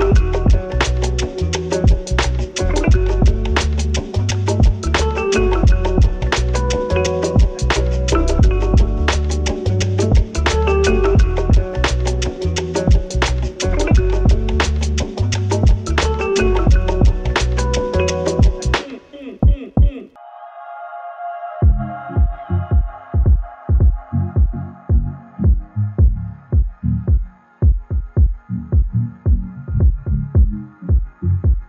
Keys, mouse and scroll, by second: 0.0 Delete, 13.2-21.5 drag, 22.0 click, 24.8 click.